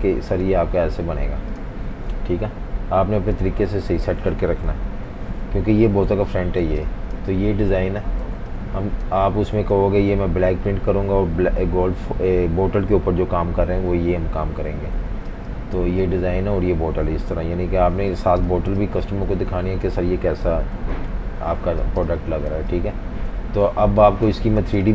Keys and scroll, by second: 4.7 super+-, 4.9 super+-, 6.6 v, 6.8 space, 8.2 typing, 9.8 v, 15.0-15.8 typing, 17.3 super+-, 17.5 super+-, 18.3 typing, 20.9 super+-, 21.1 super+-, 21.9-23.5 typing, 24.6 v, 24.8 space.